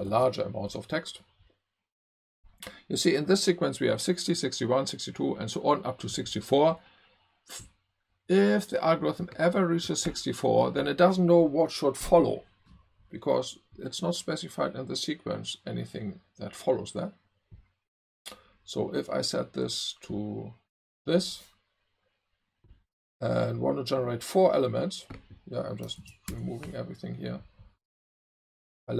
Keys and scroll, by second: 0.1 super+`, 26.0 super+a, 26.3 BackSpace.